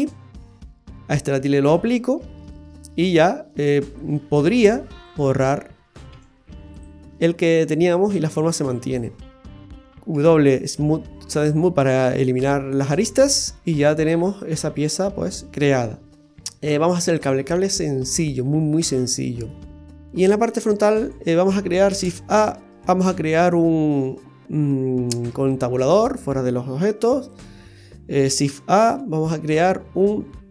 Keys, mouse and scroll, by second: 1.6 click, 3.1 Tab, 4.1 Tab, 5.1 right click, 6.1 x, 7.5-8.3 scroll up 2, 7.9 middle click, 9.2 right click, 10.1 w, 11.4-12.6 scroll up 5, 12.6 scroll down 2, 12.9-13.3 scroll down 5, 13.6 middle click, 16.1 scroll up 3, 16.8-17.7 scroll down 2, 18.0-18.3 scroll up 3, 18.3-19.2 scroll down 4, 18.9 middle click, 19.8 click, 19.8-20.1 scroll down 1, 20.3-20.8 scroll down 1, 21.0 click, 21.9 shift+a, 25.2 Tab, 27.3 right click, 28.4 shift+a.